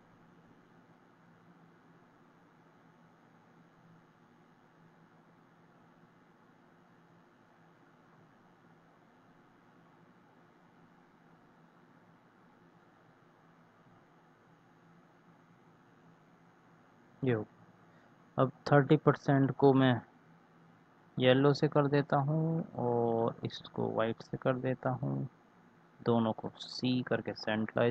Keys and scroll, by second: 3.5 Right, 26.8 c.